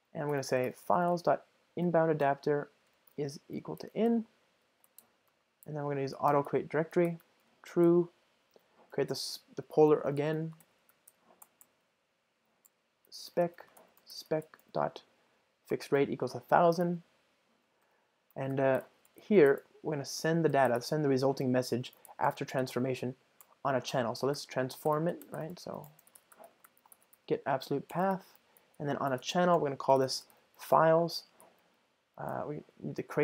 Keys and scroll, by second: 1.9 Return, 6.9 Return, 28.0 Return.